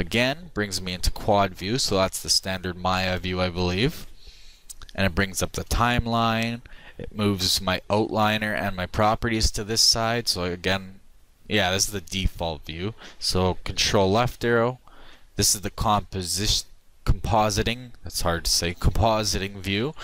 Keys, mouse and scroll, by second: 14.5 ctrl+Left.